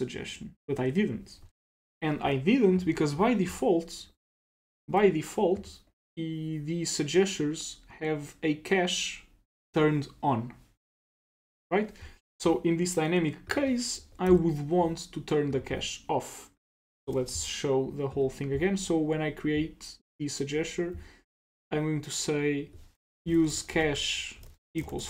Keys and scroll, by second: 4.3 super+w, 14.3 ctrl+c, 17.1 super+BackSpace.